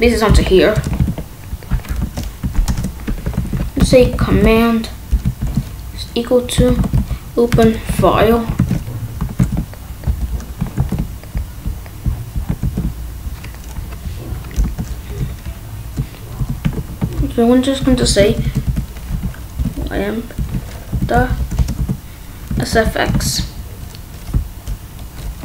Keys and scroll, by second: 0.0 ctrl+v, 0.7 Return, 0.9 ctrl+s, 1.9 Left, 2.3 ,, 2.7 space, 3.3 ctrl+s, 3.7 c, 4.2 a, 6.3-7.4 typing, 7.4 Return, 7.9 ctrl+s, 8.1 Right, 8.5 ctrl+s, 10.0 Down, 10.7 ctrl+s, 12.5 ctrl+s, 14.5 Left, 15.1 BackSpace, 16.7 ctrl+z, 17.1 BackSpace, 18.6-21.7 typing, 23.1 shift+9.